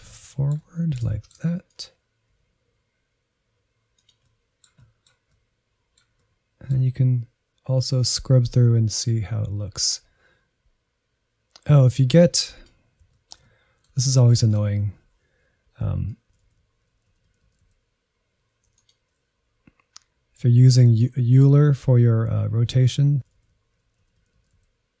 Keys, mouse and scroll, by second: 0.0 scroll down 1, 0.3-1.7 middle drag, 1.7 click, 2.3 g, 4.2-8.1 middle drag, 8.1-13.1 drag, 13.1-14.5 shift+middle drag, 14.5-19.1 drag, 21.5-21.9 scroll down 7, 23.8 click, 24.1-25.0 scroll down 5.